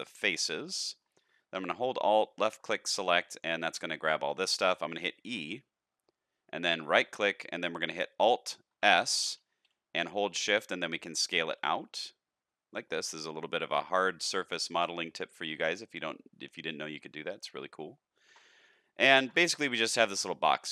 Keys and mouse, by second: 0.5 middle click, 0.5 x, 2.1 alt+click, 2.8 shift+middle click, 4.0 shift+middle click, 5.2 e, 8.8 alt+s, 18.7 middle click, 19.1 alt+a, 19.4 shift+middle click, 19.8-20.7 middle drag.